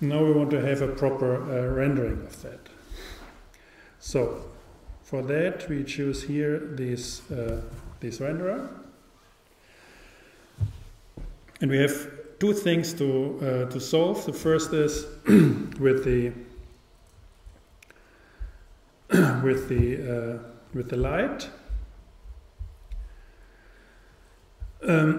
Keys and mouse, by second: 5.4-7.3 drag.